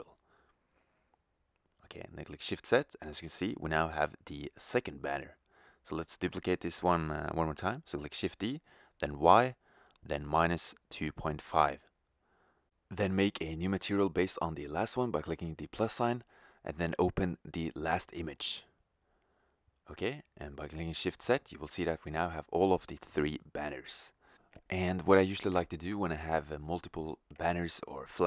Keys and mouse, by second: 1.8 shift+z, 4.5 shift+z, 5.3 click, 6.6 shift+d, 6.9 g, 13.7-15.3 drag, 18.3-19.7 drag, 19.7 shift+z, 26.3-27.6 middle drag, 27.6 n.